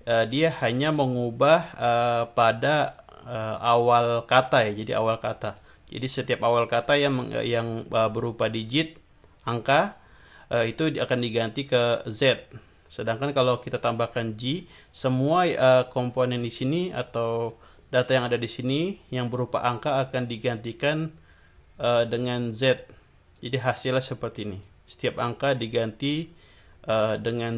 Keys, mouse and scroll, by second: 3.7-5.7 drag, 14.1 click, 16.7 click, 17.4 click, 18.0-19.5 drag, 21.8-23.5 drag, 24.6-27.5 drag.